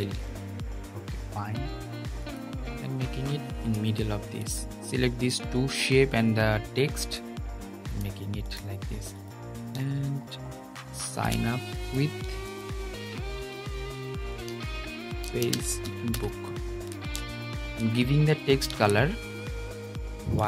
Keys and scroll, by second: 18.4 super+a.